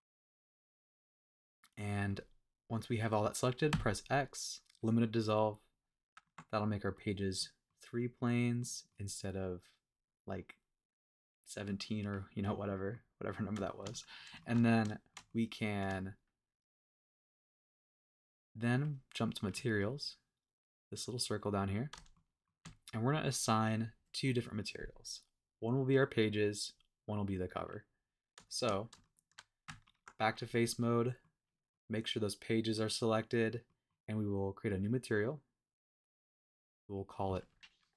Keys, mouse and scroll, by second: 2.2 scroll down 1, 6.2 Tab, 6.4 x, 7.3-7.7 middle drag, 8.6-9.0 middle drag, 9.9-10.9 scroll up 2, 12.1-12.6 scroll down 3, 12.6-13.0 middle drag, 13.0 scroll up 2, 13.3 scroll down 2, 13.6 shift+middle drag, 13.9 middle drag, 14.4 shift+middle drag, 14.8 scroll up 1, 14.8 middle drag, 15.1 scroll down 1, 15.3-15.8 shift+middle drag, 18.7 click, 19.2 middle click, 19.7-21.0 scroll up 1, 21.9 scroll up 1, 22.1-23.7 shift+middle drag, 22.5-22.9 shift+scroll down 3, 28.0-28.3 scroll up 2, 28.7 scroll down 1, 29.0-29.4 shift+middle drag, 29.6 Tab, 30.9 scroll down 1, 31.2 middle click, 32.7 scroll up 1, 32.8 middle click, 33.6 middle click, 33.9 scroll down 1, 34.6-35.5 drag, 36.2 click, 36.9-37.9 drag.